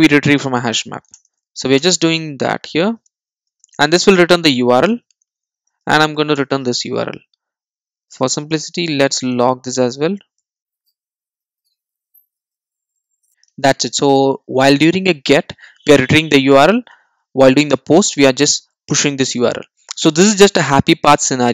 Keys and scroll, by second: 1.1 alt+Return, 6.3 Return, 7.6 Return, 8.8 Tab, 13.0 Return.